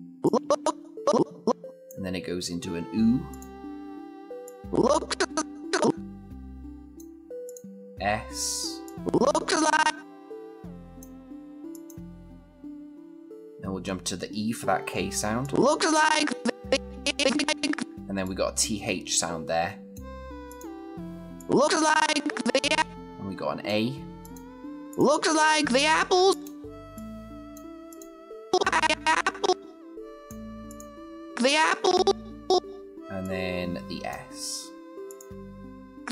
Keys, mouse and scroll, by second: 15.2-17.9 click.